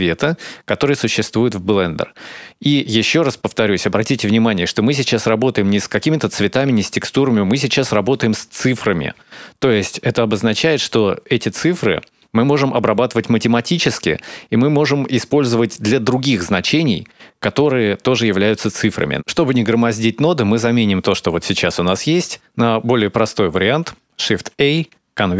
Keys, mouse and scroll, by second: 17.2-17.8 scroll down 2, 17.6 scroll up 1, 18.0 scroll down 1, 18.2 middle click, 23.7 shift+a.